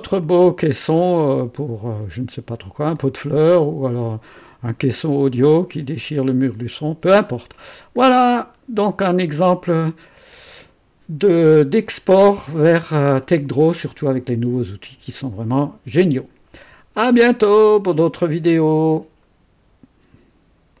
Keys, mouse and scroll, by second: 0.1 click, 1.1-2.7 drag, 2.9-4.5 drag, 4.6-8.8 drag, 9.2-10.7 drag, 11.8-12.6 drag, 13.3 right click, 19.1 right click, 20.7 click.